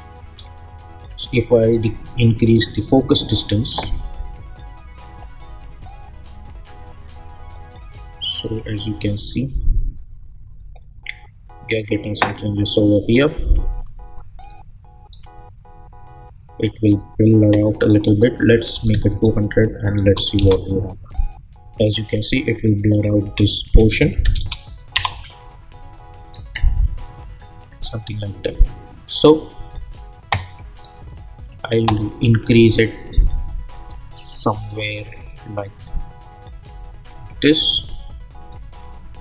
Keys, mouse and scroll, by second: 1.1-15.0 drag, 15.0-16.9 scroll down 1, 18.0 click, 20.4 Return, 22.9 click, 24.9 Return, 28.9-34.5 drag, 36.7-39.2 drag.